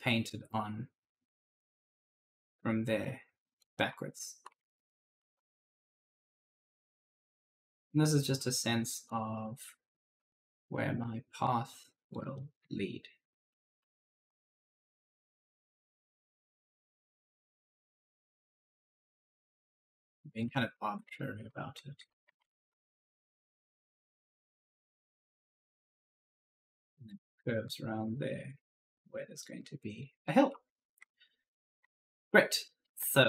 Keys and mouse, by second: 3.6-5.4 typing, 3.6 right click, 5.8 click, 9.3-10.0 typing, 9.3 right click, 10.5 click, 12.1-17.9 typing, 12.2 right click, 15.2 right click, 17.9 click, 20.2-23.0 typing, 20.4 right click, 20.8 right click, 21.3 right click, 21.8 right click, 22.1 ctrl+z, 22.6 right click, 24.3 click, 30.1-33.0 typing, 30.1 right click, 31.0 right click, 31.6 right click.